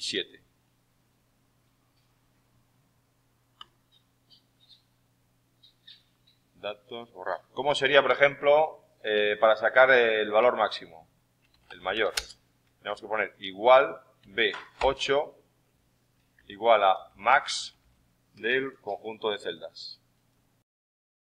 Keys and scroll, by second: 11.2-12.8 typing, 16.3-19.0 typing.